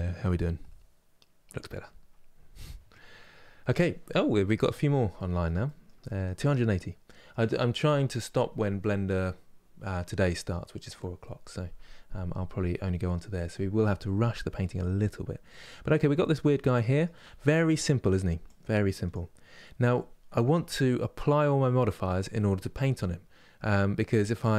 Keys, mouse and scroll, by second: 6.2-6.7 scroll up 1, 6.7-14.8 middle drag, 14.8-15.2 scroll down 1, 15.2-16.9 middle drag, 16.9 Tab, 17.3 click, 18.8 click, 19.3-24.5 middle drag.